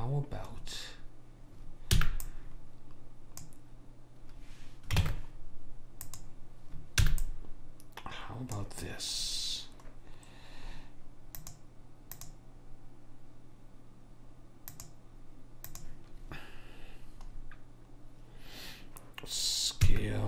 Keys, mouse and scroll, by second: 2.1 b, 5.1 ctrl+Tab, 7.2 b, 9.4-11.5 middle drag, 11.5 click, 14.8 click, 17.5-20.0 scroll up 1, 20.0 s.